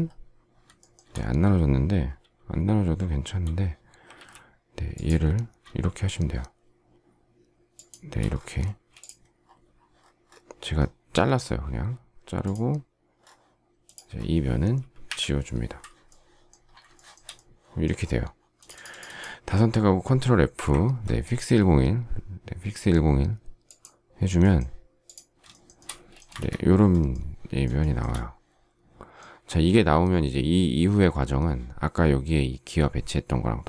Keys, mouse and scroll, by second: 0.7 shift+middle click, 4.0 alt+x, 7.6 shift+click, 8.5 space, 15.0 Delete, 16.9 shift+middle click, 25.6 shift+middle click, 25.7 shift+middle click, 26.1 space, 26.2 Escape, 27.7 shift+middle click.